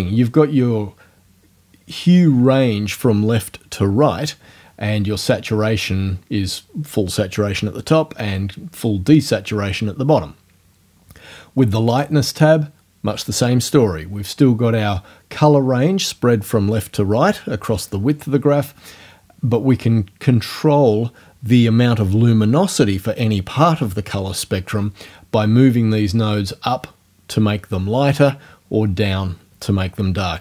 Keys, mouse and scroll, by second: 11.9 click.